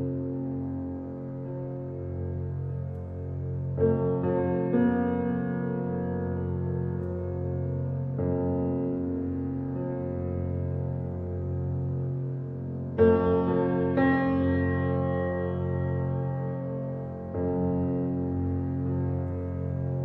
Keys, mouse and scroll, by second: 0.7 click, 1.1 scroll up 1, 1.2-1.7 middle drag, 1.7-2.2 scroll up 2, 2.2-3.5 shift+middle drag, 3.5 click, 4.2-5.5 scroll down 1, 5.5 Tab, 5.9-7.9 middle drag, 7.9 click, 8.9-9.9 middle drag, 9.9 click, 12.3 i, 14.0 ctrl+r, 16.9 click, 17.7 middle click, 18.3 shift+click, 18.6-19.8 middle drag, 19.8 i.